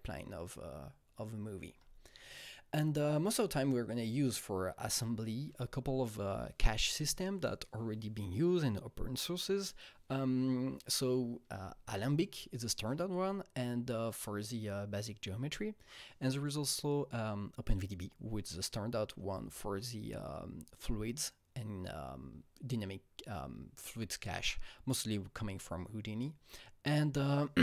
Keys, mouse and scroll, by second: 1.6 Right.